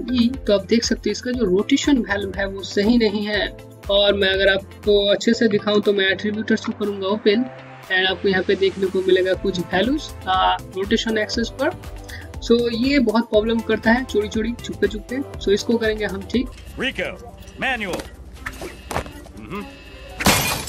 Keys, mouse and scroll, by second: 1.9 e, 6.2 a, 7.7 click.